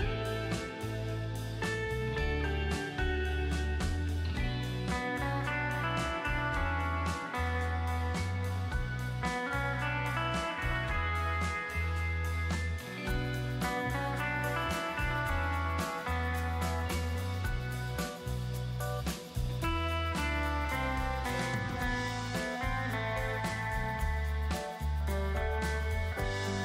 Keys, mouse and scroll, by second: 3.8 ctrl+b, 4.9-10.5 drag, 20.5 space, 20.8 right click, 21.0 space, 21.1 click, 21.8 ctrl+click, 23.2 right click, 23.4 click, 24.2 alt+t, 24.6-24.9 typing, 26.0 space, 26.2 ctrl+click.